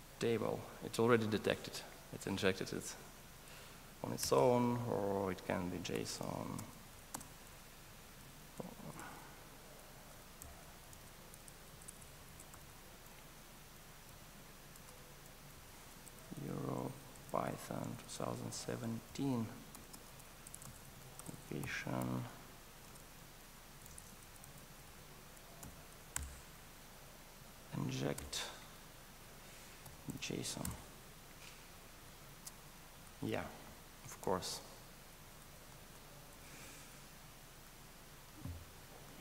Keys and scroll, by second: 9.0 alt+BackSpace, 26.2 alt+Return, 37.2 ctrl+alt+shift+Right.